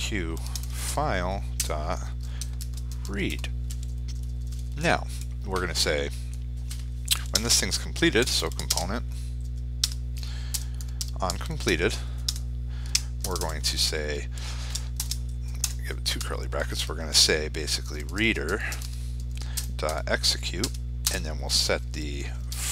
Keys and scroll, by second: 8.3 ctrl+space, 22.5 ctrl+space.